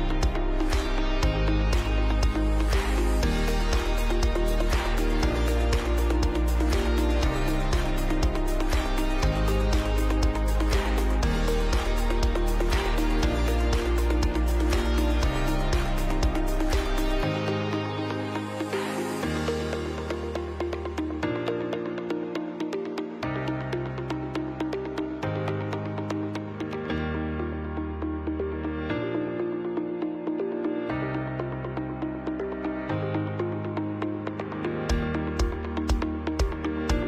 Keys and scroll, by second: 0.7 ctrl+shift+], 1.0 space, 1.4 ctrl+alt+b, 1.5 space, 7.1 Up, 7.3 Up, 7.4 Up, 8.1 Up, 8.2 Up, 8.2 Up, 8.4 Left, 8.5 Left, 8.9 Right, 9.0 Right, 9.1 Right, 25.5 ctrl+b, 25.9 Up, 26.2 Up, 28.3 Up, 28.3 Up, 28.5 Up, 30.1 ctrl+alt+space, 33.4 Right, 33.5 Right, 33.7 Left, 33.7 Left, 33.8 Left.